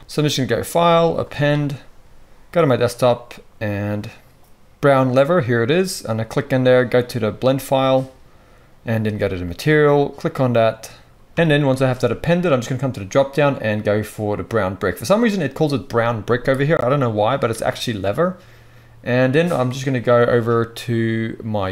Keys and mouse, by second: 10.6-11.1 drag, 16.2 z, 16.7-21.7 middle drag, 17.3-17.9 drag, 17.3-17.9 right drag, 18.4-21.7 drag, 18.4-21.7 right drag.